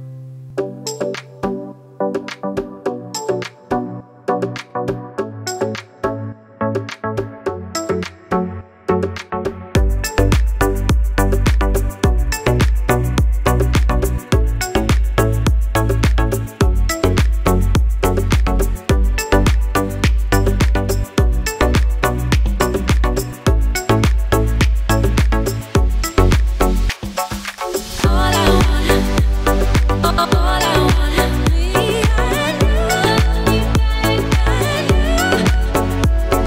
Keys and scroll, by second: 1.2 alt+shift+Return, 1.9 Return, 5.6 alt+shift+Return, 6.3 alt+Return, 8.7 alt+shift+Return, 9.5 alt+Return, 12.3 alt+shift+Return, 12.8 alt+Return, 16.5 alt+shift+Return.